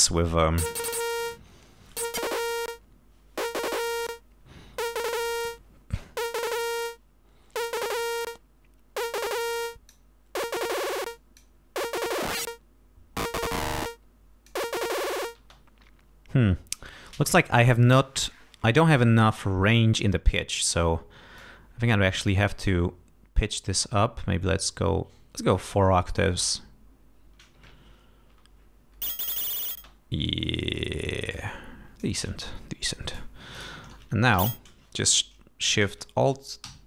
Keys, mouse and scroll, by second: 2.0 click, 4.0 click, 7.7 click, 9.7 click, 11.1 click, 12.2-14.7 drag, 15.4 space, 21.4-25.7 drag, 26.6-27.0 scroll down 2, 28.3 l, 29.8 space, 31.4 click, 32.9 click, 33.6 click, 34.0 e, 34.4 ctrl+a, 36.7 alt+shift+Down.